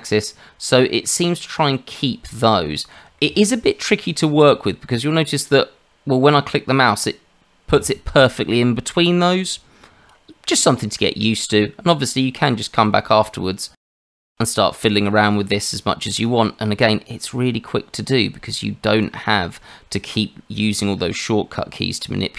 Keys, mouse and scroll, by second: 0.0 click, 2.2 shift+middle click, 3.2 shift+middle click, 7.0 click, 10.9 shift+middle click, 12.4 click, 14.2 click, 16.2 click, 18.0 click.